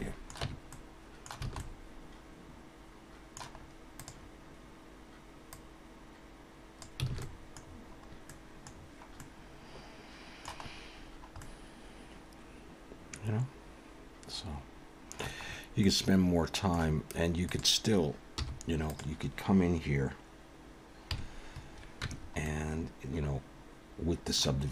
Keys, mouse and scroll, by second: 0.4 Tab, 0.7 middle click, 1.4 alt+a, 1.6 middle click, 3.6 scroll up 2, 4.0 click, 5.5 click, 7.1 alt+a, 7.2 middle click, 7.6-8.3 scroll down 4, 8.3 middle click, 8.7-9.2 scroll down 2, 9.2 middle click, 10.7-11.0 scroll up 1, 11.0-11.4 scroll down 1, 11.4 scroll down 1, 11.4 middle click, 15.5-16.2 scroll up 3, 15.8 middle click, 17.4 click, 18.4 h, 18.9 click, 21.1 KP_Decimal, 22.0 Tab, 22.4 middle click.